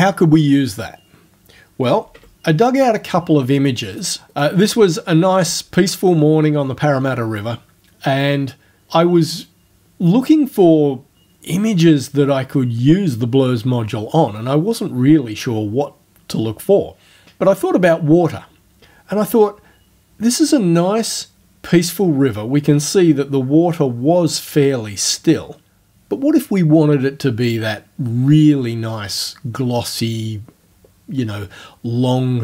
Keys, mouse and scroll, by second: 2.1 l.